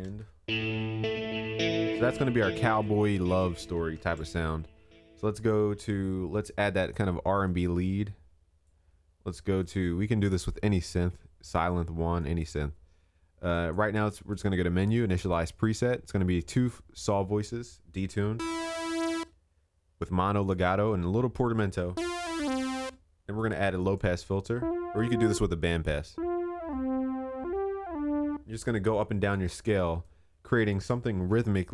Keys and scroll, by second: 4.0 ctrl+s, 4.6 ctrl+s, 31.1 ctrl+s.